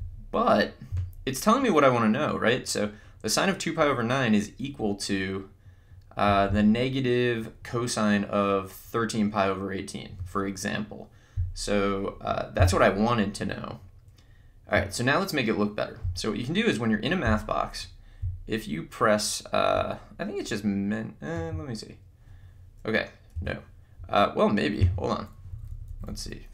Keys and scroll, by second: 21.4 Menu, 23.3 Escape, 25.0 Menu, 25.6 Down.